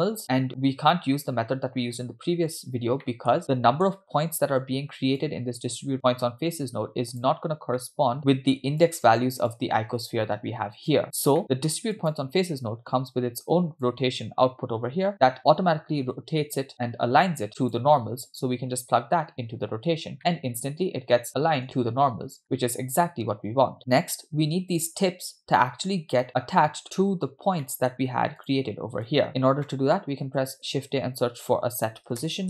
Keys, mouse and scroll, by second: 1.3-1.6 scroll down 1, 3.0 middle click, 3.5 scroll up 2, 3.6 middle click, 4.2-4.7 scroll up 1, 4.8-5.2 scroll down 1, 5.3-7.2 drag, 7.6 scroll down 1, 7.8 middle click, 8.2 click, 9.5-11.0 drag, 12.0 middle click, 12.0 scroll up 3, 12.0 click, 13.9-17.8 drag, 20.2-21.6 middle drag, 22.4-23.4 middle drag, 22.4 scroll down 2, 26.2 middle click, 27.4 scroll down 2, 27.7 middle click, 28.4 click, 29.1 click, 29.2 click, 29.7 middle click, 30.2 scroll up 3, 30.6 shift+a.